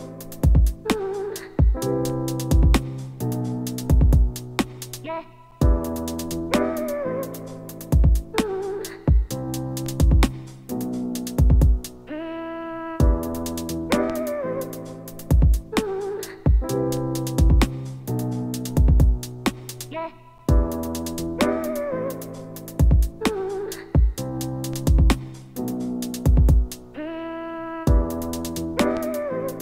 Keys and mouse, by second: 10.7-19.2 middle drag, 19.9 ctrl+z, 20.4 ctrl+z, 24.4-29.6 ctrl+drag, 28.4 ctrl+Tab, 29.4-29.6 typing.